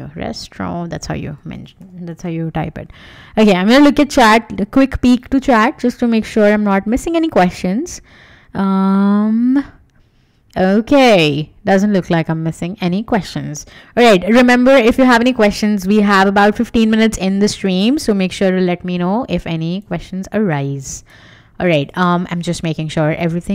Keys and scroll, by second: 1.1-2.2 typing.